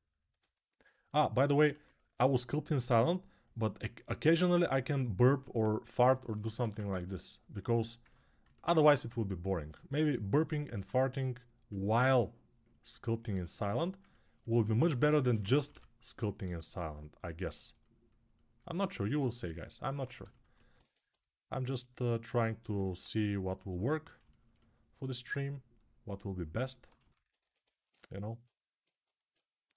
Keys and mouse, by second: 1.1-7.4 alt+drag, 6.4 alt+q, 7.4 alt+right click, 8.0-10.8 alt+middle drag, 10.8-14.3 right drag, 14.3-27.4 drag, 14.7 g, 15.1 ], 15.3 ], 20.9 ctrl+1, 28.2-29.7 alt+drag.